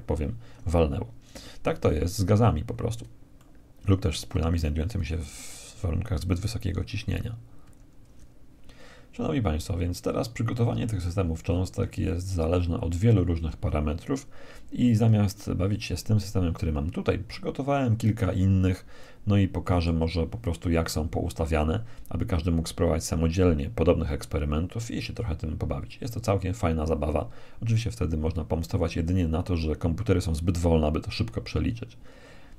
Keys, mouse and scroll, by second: 2.9-4.1 middle drag, 6.4 Escape, 9.1-10.3 scroll up 1, 10.3-11.5 scroll down 1, 11.5-12.7 scroll down 1, 17.1-19.1 middle drag.